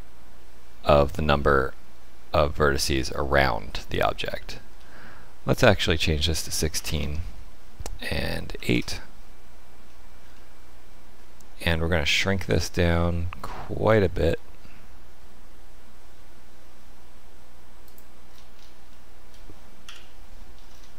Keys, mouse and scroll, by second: 1.3 middle click, 4.2 middle click, 5.5 click, 9.8 shift+middle click, 10.1 shift+middle click, 10.3 middle click, 12.4 s, 18.2-18.8 scroll up 6, 18.8 shift+middle click, 19.8 KP_1, 20.6-20.9 scroll up 3.